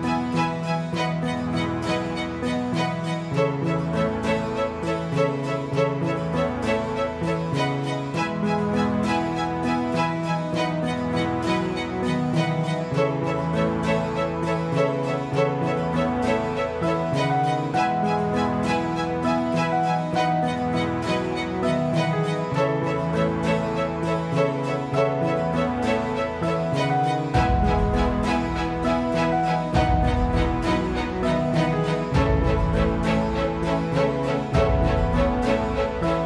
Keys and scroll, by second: 1.0 f, 2.4 ctrl+z, 17.7 alt+v, 22.2 Escape, 23.4 alt+v, 23.9 F9, 33.2 alt+v, 33.9 alt+v.